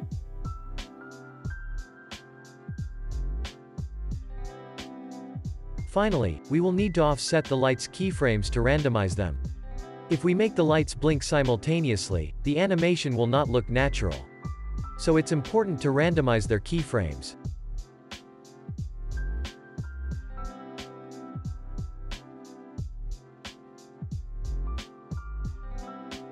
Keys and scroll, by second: 1.8 ctrl+v, 2.8 ctrl+v, 4.1 ctrl+v, 4.9 ctrl+s, 12.0 alt+x, 22.0 z, 23.1 alt+x, 23.8 alt+x, 24.6 alt+x.